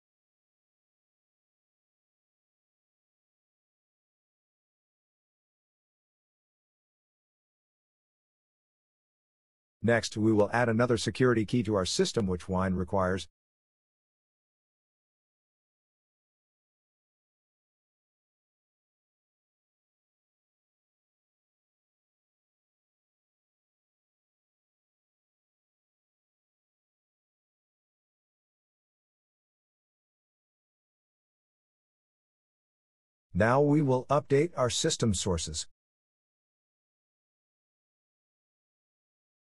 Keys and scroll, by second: 30.0 Return.